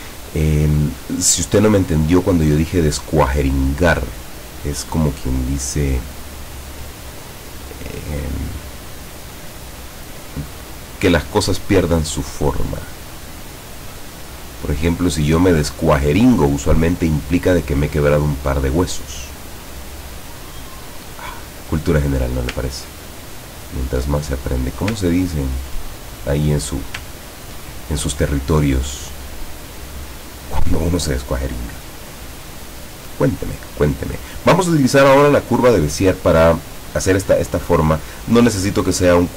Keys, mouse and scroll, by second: 0.1 click, 1.1 click, 1.5 click, 3.0-4.6 drag, 5.2 click, 7.2 click, 7.4-8.6 scroll down 2, 8.9 click, 10.3 middle click, 12.0-13.3 drag, 13.7 scroll up 1, 18.4 click, 19.6-22.4 drag, 23.0-23.8 ctrl+scroll down 3, 24.3 ctrl+click, 25.1-25.4 ctrl+scroll down 1, 27.2 ctrl+scroll down 2, 29.0 click, 29.6 click, 34.3 click.